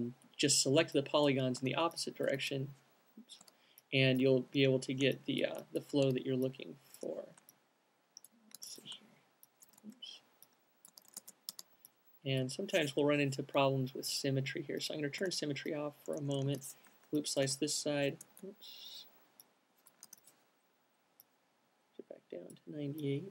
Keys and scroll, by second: 1.9 alt+q, 2.7 alt+c, 3.5-4.3 typing, 6.4 q, 8.9 c, 9.5 super+z, 10.9-12.3 typing, 14.2 q, 16.8 c, 17.8 q, 18.3 super+z, 20.4 c.